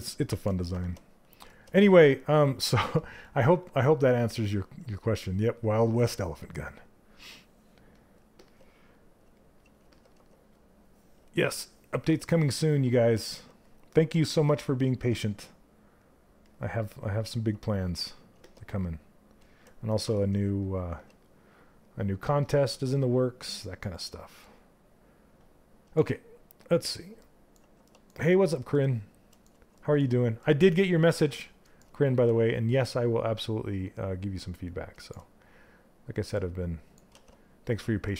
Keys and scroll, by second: 13.7 w, 19.6 q.